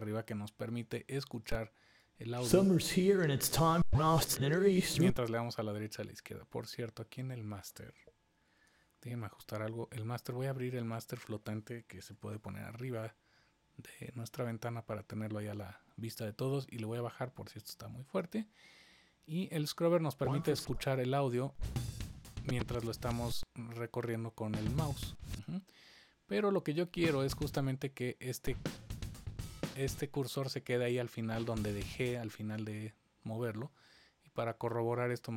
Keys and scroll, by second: 8.4 super+=, 12.1 super+=.